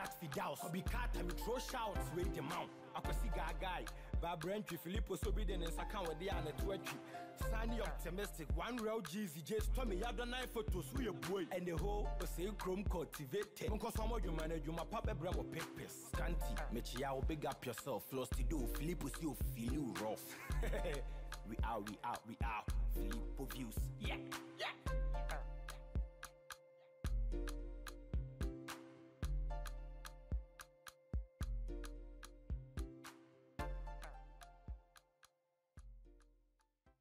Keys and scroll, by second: 7.0 ctrl+a, 10.7 ctrl+Return, 11.6 ctrl+t, 14.9 Return, 22.1 ctrl+z, 27.4 ctrl+g.